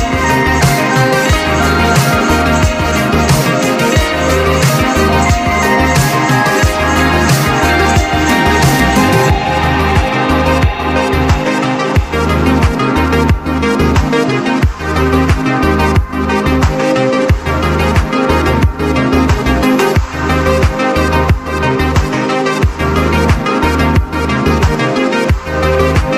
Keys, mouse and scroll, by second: 1.3 click, 3.6 alt+scroll up 1, 5.8 click, 12.3 click, 13.5 click, 15.4 click, 17.1-18.0 typing, 18.0 click, 21.1 click, 22.1 click, 23.2 click, 24.6 click.